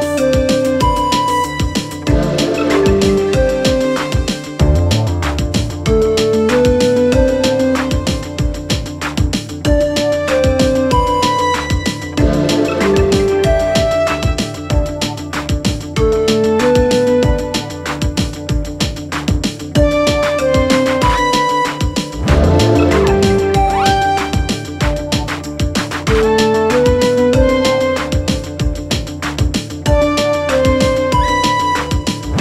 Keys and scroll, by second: 15.1-16.1 typing, 22.6-23.6 typing, 31.9 ctrl+v.